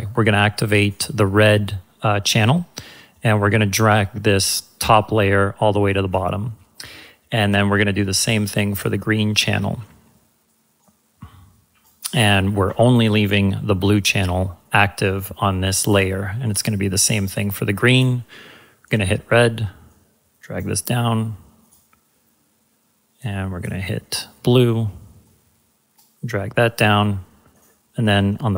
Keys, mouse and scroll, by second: 3.1-6.2 drag, 23.5 click.